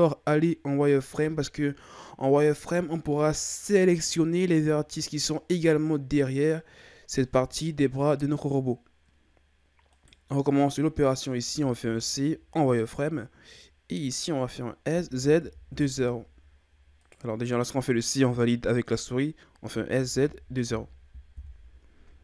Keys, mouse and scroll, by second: 9.9 right click, 11.5 c, 19.7 s.